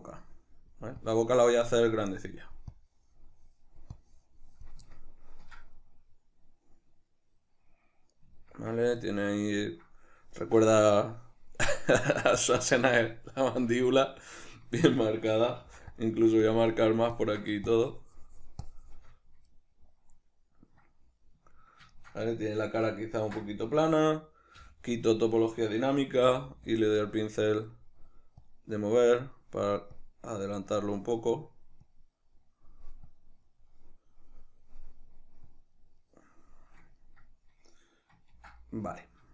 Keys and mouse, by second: 0.1-4.9 drag, 4.9-16.1 ctrl+middle drag, 15.7 f, 16.5-19.5 ctrl+drag, 19.5-26.9 middle drag, 23.3 d, 26.9 click, 27.1-28.5 middle drag, 28.5 click, 29.4 middle click, 30.0 click, 30.8-31.8 middle drag, 31.8 click, 32.4 middle click, 33.1 click, 33.7-35.5 middle drag, 35.5 click, 36.0-39.3 middle drag, 38.4 ctrl+d.